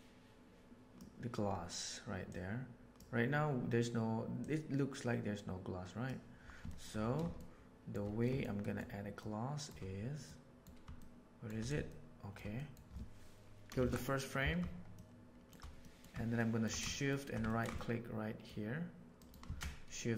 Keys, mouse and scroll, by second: 2.2 click, 4.3-6.0 drag, 6.6 shift+middle click, 7.3-7.9 shift+middle drag, 8.2 shift+middle click, 8.5 shift+middle click, 9.1-9.6 shift+middle drag, 10.2-10.5 middle drag, 10.9-11.4 shift+middle drag, 11.8-12.3 shift+middle drag, 12.5 middle click, 13.7 shift+Left, 14.9-15.3 middle drag, 15.8 middle click, 16.3 middle drag, 16.8 shift+middle drag, 17.4 ctrl+middle drag, 17.7-18.4 shift+middle drag, 19.4 shift+a.